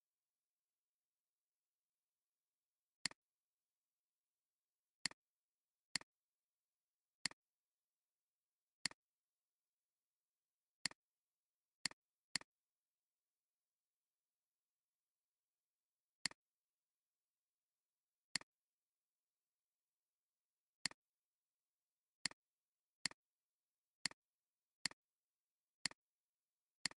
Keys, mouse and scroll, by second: 0.3 Up, 0.4 Up, 0.6 Up, 0.8 Up, 1.0 Up, 2.0 alt+scroll up 1, 3.0 shift+click, 5.6 alt+scroll down 1, 5.8 space, 6.3 space, 13.8 click, 16.4 click, 17.8 click, 22.4 click, 24.2 click, 26.4 click.